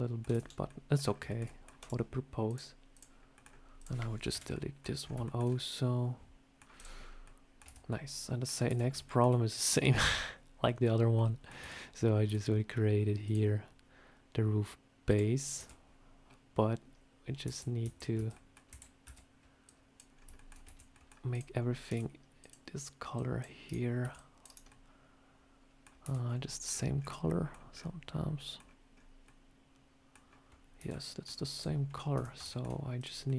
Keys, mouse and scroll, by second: 0.2 Tab, 0.3 scroll down 2, 0.5 middle click, 0.9-1.2 scroll down 3, 1.2 shift+middle click, 1.3 middle click, 1.7 click, 2.3 click, 3.2 middle click, 3.3 scroll down 1, 3.7 click, 4.2 Delete, 4.4 middle click, 4.9 scroll up 3, 5.1 shift+middle click, 5.4 middle click, 6.6 click, 6.9 scroll up 3, 7.1 middle click, 7.5 Tab, 7.8 middle click, 8.5 Tab, 8.9 shift+middle click, 11.0 middle click, 11.5 Tab, 12.1 a, 13.1 click, 15.4 Tab, 17.3 \, 17.7 \, 18.0 Tab, 18.2 middle click, 18.6 \, 18.9 Tab, 19.5 click, 20.0 scroll down 2, 20.2 shift+middle click, 20.5 Tab, 20.7 scroll up 1, 20.8 middle click, 21.2 click, 21.4 scroll up 1, 21.8 c, 24.4 c, 24.6 middle click, 25.9 Tab, 30.8 middle click, 31.4 click, 31.7 scroll up 1, 32.0 Tab, 32.4 shift+middle click, 32.9 click, 33.1 middle click.